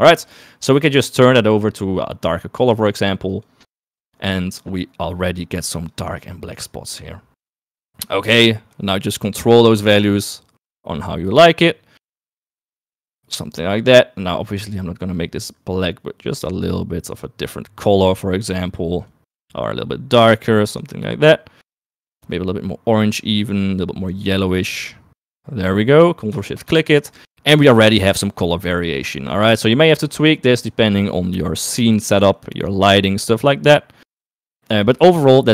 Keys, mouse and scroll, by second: 0.2 middle click, 7.8 middle click, 8.3 middle click, 9.0 click, 10.6-12.0 drag, 12.4-13.4 drag, 13.8 middle click, 14.2 click, 26.2 right click, 26.8 ctrl+shift+click, 28.9 right click.